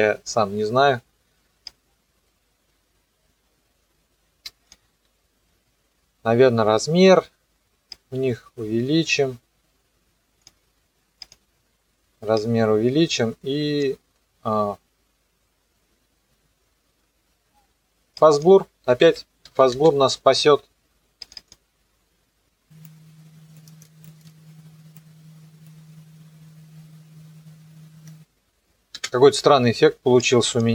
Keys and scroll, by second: 18.7-20.1 typing, 21.4 space, 23.8 ctrl+c, 25.9 KP_0, 28.0 KP_0, 29.0 space.